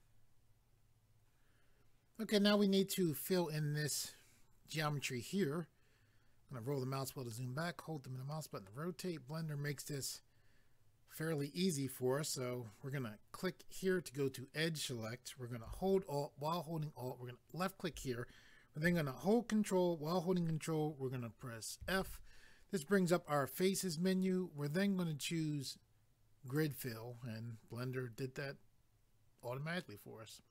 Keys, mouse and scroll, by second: 6.4 scroll down 1, 7.3 middle click, 13.8 click, 17.5 alt+click, 21.8 ctrl+f, 26.5 click, 29.8 middle click.